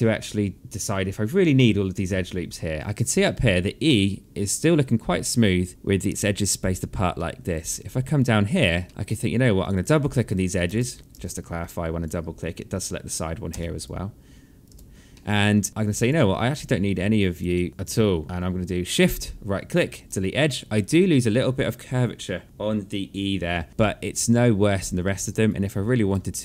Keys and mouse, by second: 2.8 alt+middle click, 6.7 alt+middle click, 8.4 alt+middle click, 9.2 click, 10.3 space, 11.1 alt+click, 13.1 space, 14.2 space, 14.7 alt+middle click, 15.6 shift+click, 16.9 shift+click, 18.6 shift+right click, 20.4 alt+middle click, 23.6 alt+middle click, 25.0 right click.